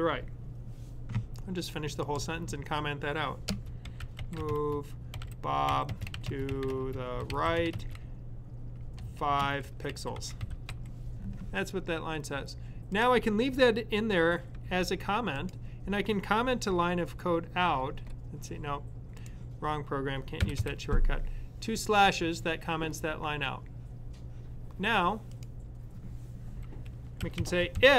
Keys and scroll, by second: 3.6-11.1 typing, 17.7 super+/, 20.3 typing, 27.3-27.9 typing.